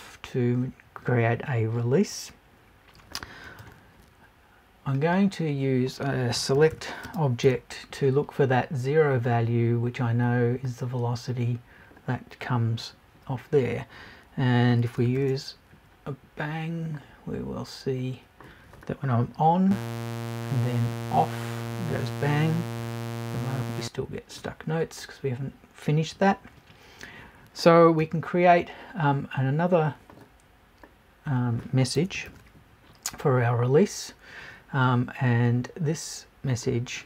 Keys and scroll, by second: 32.0 BackSpace.